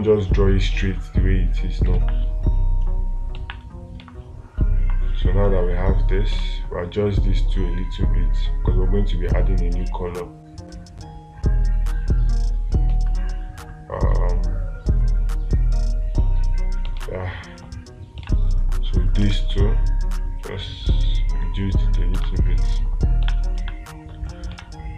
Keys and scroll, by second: 2.4 space, 4.4 space, 17.4 space, 22.7 space, 24.0 space.